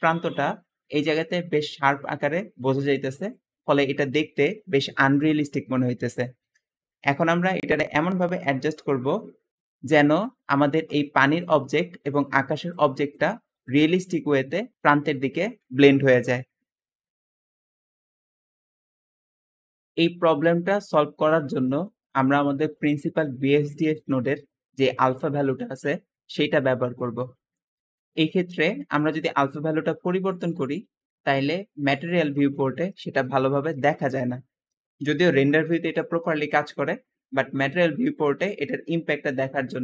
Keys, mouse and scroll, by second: 3.8 Escape, 9.9 `, 19.5 middle click, 20.2 middle click, 20.2-20.8 scroll up 2, 21.2-24.5 middle drag, 21.2-24.5 scroll up 2, 39.1 middle click.